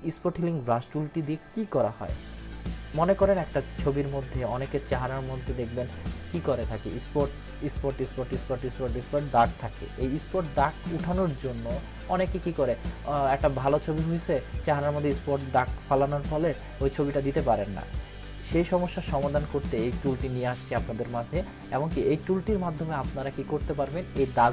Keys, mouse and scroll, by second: 3.1 click, 3.4 ctrl+=.